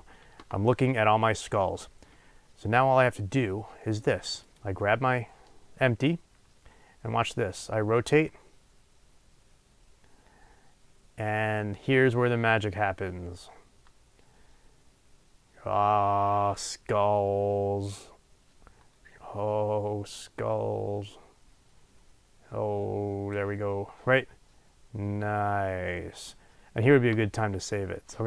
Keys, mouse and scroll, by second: 4.5 click, 8.9-28.2 drag.